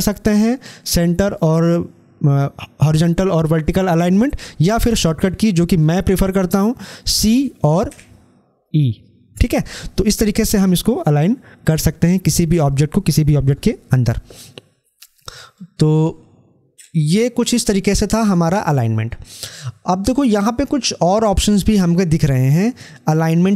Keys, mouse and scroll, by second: 7.0-7.7 typing, 15.4-18.2 drag.